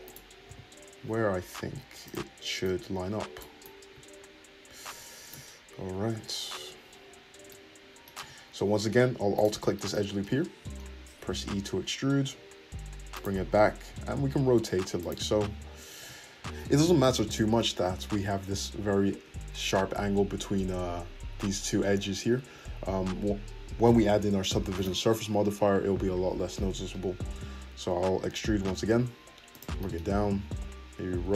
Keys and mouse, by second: 0.4 g, 2.6-4.6 drag, 4.6-5.9 shift+middle drag, 5.9-9.4 drag, 5.9 `, 8.1 `, 9.4 alt+shift+middle click, 10.3-16.6 drag, 11.3 e, 13.9 r, 15.4 g, 16.6 middle click, 16.7-29.2 shift+drag, 27.9 e, 29.7 shift+click, 30.5 r.